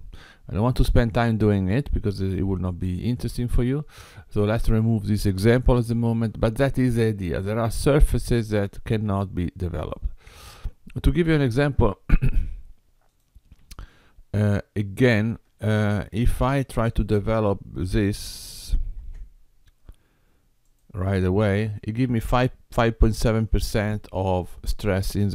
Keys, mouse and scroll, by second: 5.7 click, 7.0 middle click, 11.8 Tab, 13.2 click, 15.3 Tab, 16.8 click, 18.9 ctrl+l, 20.6 click.